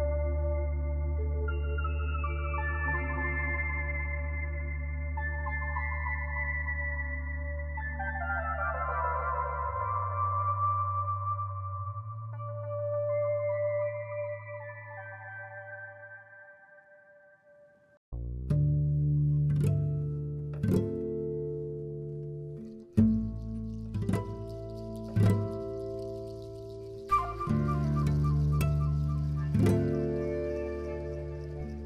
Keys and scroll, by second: 3.2 z, 3.9 z, 4.5 z, 5.6 z, 10.5 z, 12.2 z, 12.8 z, 13.1 ctrl+alt+1, 13.3 b.